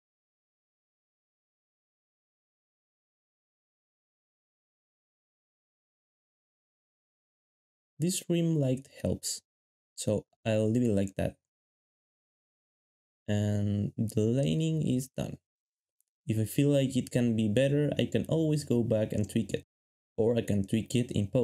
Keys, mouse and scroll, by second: 1.2 g, 2.9 1, 4.9 ctrl+b, 8.0 ctrl+b, 8.7 ctrl+b, 12.4 ctrl+b, 14.0 ctrl+shift+s.